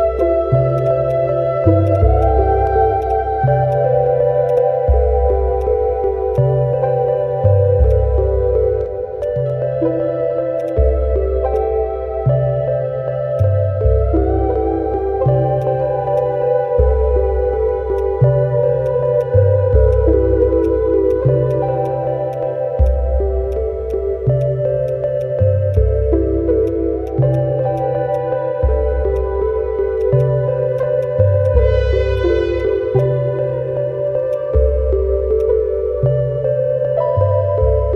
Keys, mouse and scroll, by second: 0.5 alt+click, 0.8 double click, 1.1 alt+click, 1.9 double click, 2.2 alt+click, 3.0 double click, 3.4 alt+middle click, 3.9 alt+click, 4.5 double click, 4.8 alt+middle click, 5.6 alt+click, 5.9 alt+middle click, 6.9 scroll down 1, 7.2 alt+middle click, 7.6 scroll down 1, 8.1 alt+click, 8.2 alt+middle click, 8.6 scroll up 1, 9.0 alt+middle click, 9.2 alt+click, 9.7 alt+middle click, 9.8 alt+scroll up 1, 10.6 double click, 11.1-11.4 scroll down 1, 11.5 alt+click, 11.8 alt+middle click, 12.5 alt+middle click, 12.6 alt+scroll up 1, 12.8 alt+middle click, 13.1 alt+middle click, 13.3 alt+click, 15.3 alt+middle click, 15.8 alt+click, 15.9 alt+middle click, 16.2 alt+click, 17.0-17.4 scroll down 1, 17.4 alt+middle click, 17.9 right click, 19.7-20.0 scroll down 1, 25.3-25.9 scroll down 1, 28.4-28.8 scroll up 1, 29.1 alt+click, 30.2 double click, 30.4 alt+middle click, 30.7 alt+click, 31.0 alt+right click, 32.9 alt+click, 34.5 scroll up 1, 35.0 alt+middle click, 35.4 alt+click, 35.8 alt+scroll up 1.